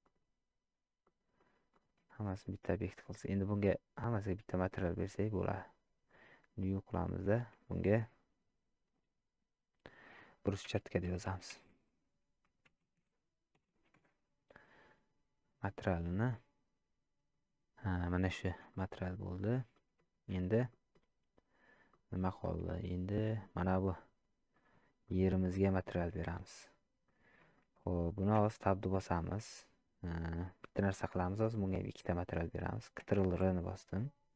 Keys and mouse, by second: 0.1 click, 1.0-1.4 middle drag, 2.2 shift+middle drag, 4.3 click, 7.5-14.9 drag, 18.7 shift+middle drag, 19.1-19.4 middle drag, 19.7 shift+middle drag, 20.7 middle click, 21.9 middle click, 22.4 shift+middle drag, 23.6 click, 24.5 middle click, 25.1 middle click, 26.0 shift+middle click, 27.0 middle click, 27.6 shift+middle click, 29.1 shift+middle click.